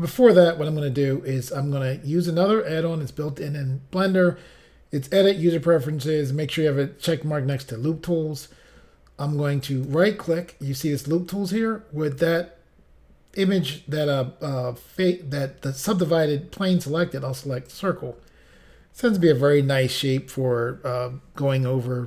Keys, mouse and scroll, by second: 9.6 right click, 17.7 click.